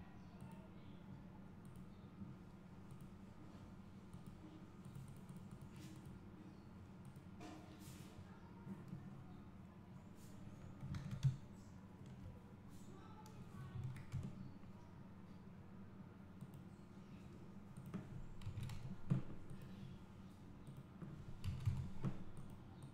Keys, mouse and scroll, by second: 7.4-9.9 drag, 9.9 scroll down 1, 11.8 `, 14.3 KP_0, 15.4-15.8 scroll up 1, 16.9 click, 19.7 click.